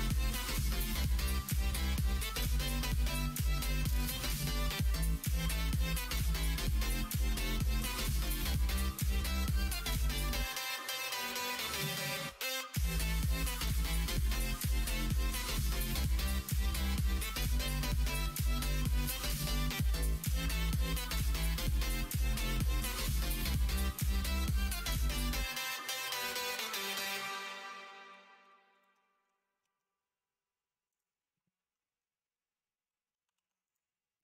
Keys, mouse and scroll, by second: 0.2 middle click, 1.1 e, 2.1 ctrl+z, 2.7 s, 5.7 middle click, 7.0 e, 8.9 middle click, 10.5 g, 12.8 h, 13.0 y, 13.7 ctrl+z, 13.9 ctrl+z, 14.9 g, 17.1 alt+z, 18.0 KP_1, 18.1 KP_3, 21.6 s, 28.1 2, 29.6 ctrl+b, 33.3 alt+z, 33.7 click, 34.1-34.2 middle drag.